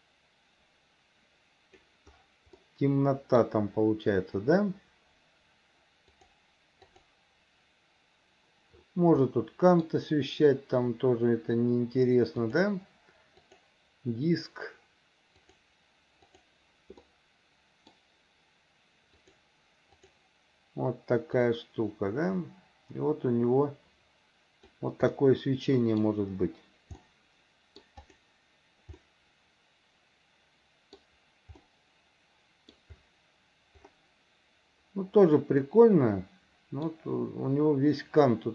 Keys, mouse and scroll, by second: 2.6 middle click, 6.2 click, 9.3 middle click, 12.5-13.6 drag, 15.5-16.5 drag, 17.1 middle click, 19.2 click, 21.4-24.7 drag, 25.2 middle click, 27.1 middle click, 28.1 click, 29.0-31.0 middle drag, 31.6-32.8 middle drag, 35.7-36.9 middle drag.